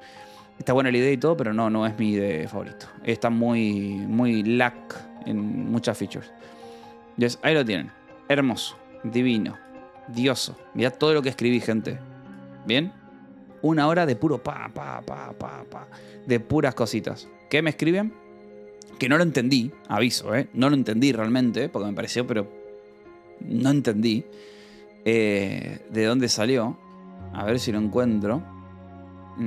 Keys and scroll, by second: 0.5 End, 7.3 space, 8.0 ctrl+s, 9.9 r, 11.3-13.1 typing.